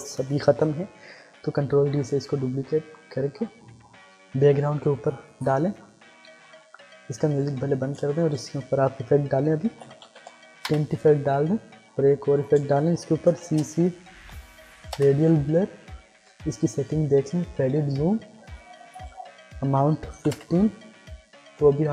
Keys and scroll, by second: 1.2 ctrl+d, 7.9 ctrl+space, 9.4-10.6 typing, 10.6 Return, 12.6 ctrl+space, 13.2 c, 13.6 space, 14.1 r, 14.9 Return, 19.6 1, 20.1 5, 20.2 Return.